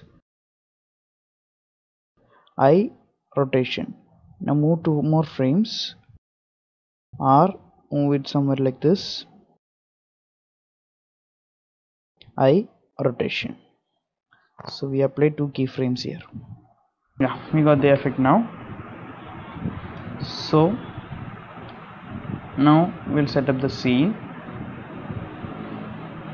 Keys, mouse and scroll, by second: 5.5 Right, 5.8 Right, 8.3 Right, 9.3 r, 12.0 i, 14.0 click, 14.4 space, 15.2 click, 15.8 click, 16.7 click, 17.9 click, 20.4 space, 20.8-21.1 scroll down 6, 21.1 middle click, 21.7 scroll down 1, 22.1 middle click, 22.5 scroll down 2, 23.0 click, 23.3 middle click, 23.9 shift+middle click, 24.5-25.0 scroll down 3, 25.0 middle click, 25.6-26.0 scroll down 3, 25.9 shift+middle click.